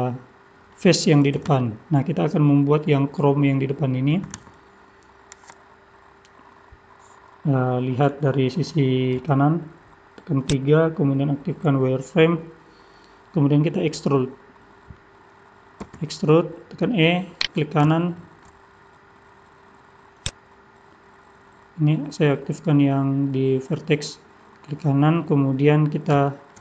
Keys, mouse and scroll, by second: 9.2 KP_3, 10.4 click, 11.3 scroll up 2, 12.2-13.4 scroll up 2, 15.9 e, 18.0 shift+middle click, 20.2 click, 26.2 shift+middle click.